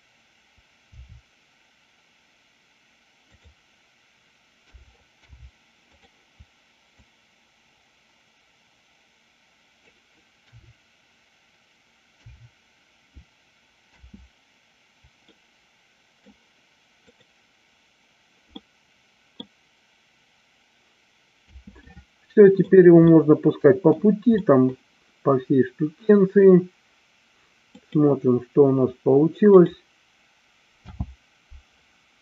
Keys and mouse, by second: 1.0 r, 4.5 a, 5.2 i, 7.0-9.8 drag, 10.4 KP_3, 13.8 space, 15.2-16.5 middle drag, 17.1-17.6 drag, 18.7 middle click, 21.5 space, 22.0-22.6 middle drag, 23.1-23.9 middle drag, 24.4 middle click, 28.2-28.6 drag, 29.6 click, 30.8 space.